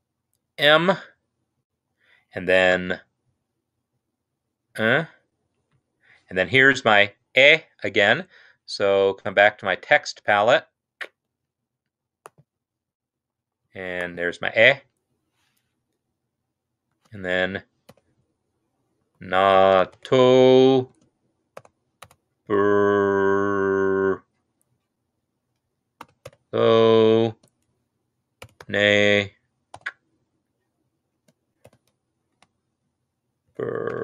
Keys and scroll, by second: 0.5 typing, 2.6 shift+-, 4.6 shift+-, 17.0-17.9 typing, 18.9-22.9 typing, 25.9-27.1 typing, 28.3 typing, 29.7 typing, 31.1-32.1 typing, 33.3-34.0 typing.